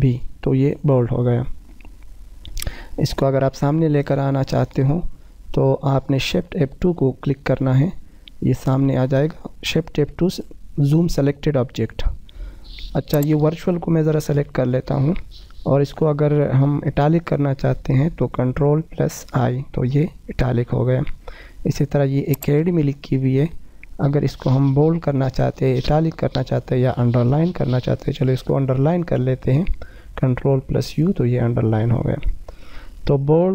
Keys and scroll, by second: 7.0 shift+F2, 18.7 ctrl+i, 27.1 ctrl+u, 27.9 ctrl+u, 29.9 F4.